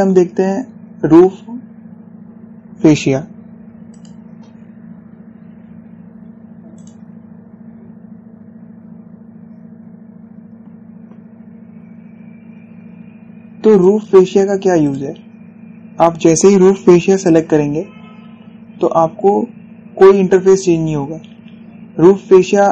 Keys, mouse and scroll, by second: 1.8 click, 4.6 click, 6.5 typing, 7.4 click, 9.8 typing, 14.4 click, 17.4 typing, 17.9 click, 20.1 typing.